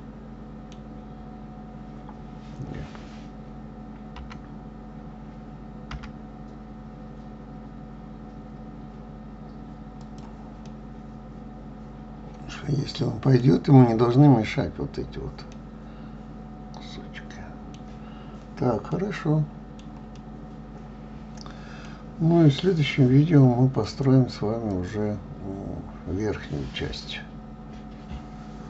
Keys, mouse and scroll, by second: 11.0-14.1 middle drag, 15.9-18.6 middle drag, 18.6-19.3 scroll down 3, 19.3-23.6 middle drag, 24.2 click, 25.1 click.